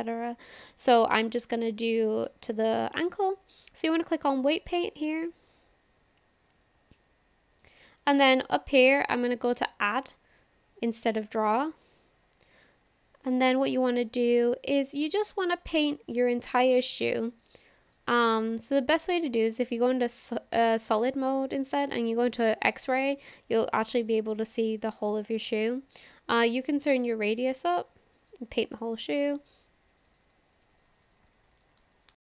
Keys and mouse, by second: 2.3-5.0 drag, 8.0-9.6 drag, 16.2 click, 17.0 click, 17.2 click, 17.4 click, 17.5 click, 17.6 click, 18.1 click, 21.9 click, 22.7-24.0 middle drag, 24.4 click, 24.5 click, 24.7 click, 24.8 click, 25.0 click, 25.1 click, 25.3 click, 25.4 click, 25.6 click, 27.2 click, 27.9 click, 28.2 click, 28.4 click, 28.5 click, 28.7 click, 28.8 click, 29.0 click, 29.1 click, 29.3 click, 30.0 click, 30.1 click, 30.3 click, 30.4 click, 30.6 click, 30.7 click, 30.9 click, 31.1 click, 31.2 click, 31.4 click, 31.6 click, 31.7 click, 32.0 click.